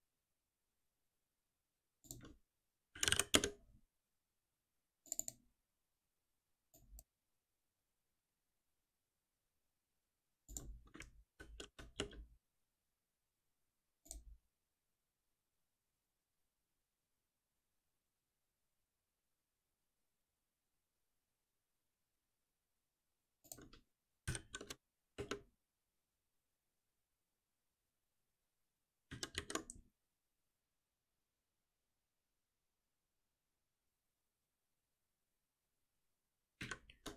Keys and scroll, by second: 3.3 Return, 11.3 ctrl+alt+n, 24.2 ctrl+alt+n, 29.1 ctrl+y, 36.6 ctrl+shift+Up.